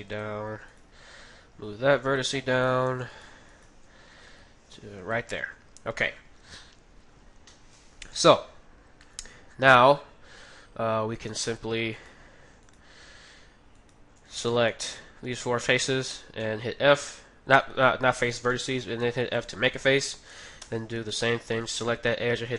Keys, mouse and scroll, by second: 0.7-2.3 right drag, 0.9 g, 3.1-5.4 right drag, 4.3 g, 6.0-11.2 middle drag, 11.1-16.8 right drag, 14.5 ctrl+z, 14.7-16.3 middle drag, 16.1 f, 16.5 middle click, 18.2-20.0 middle drag, 20.5 f, 20.8 middle click, 20.8-22.5 right drag.